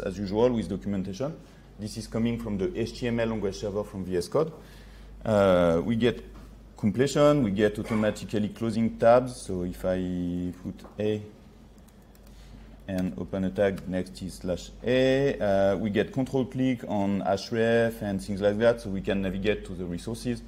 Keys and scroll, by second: 14.9 ctrl+z.